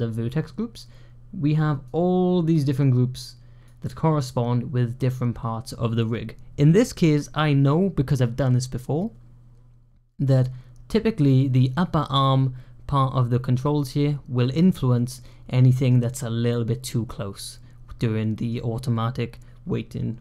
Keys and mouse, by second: 1.8-3.5 drag, 14.9 middle click, 15.6 middle drag, 17.3-18.3 middle drag.